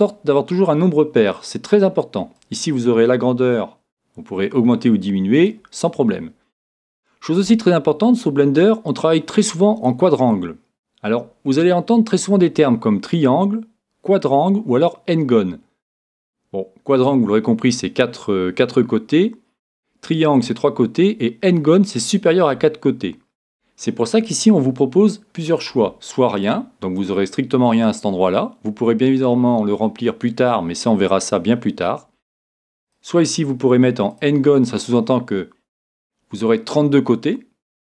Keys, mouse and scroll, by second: 2.4-4.2 drag, 25.4-27.3 drag, 32.9-34.7 drag.